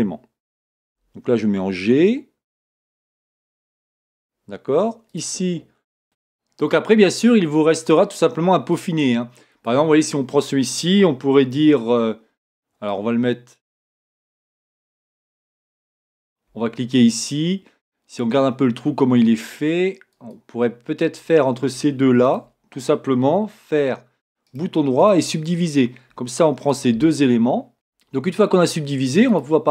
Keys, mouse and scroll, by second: 1.0 g, 5.2 click, 15.4 click, 16.6 g, 22.4 shift+click, 25.2-26.8 right drag, 26.8 click, 27.7 v, 29.5 click.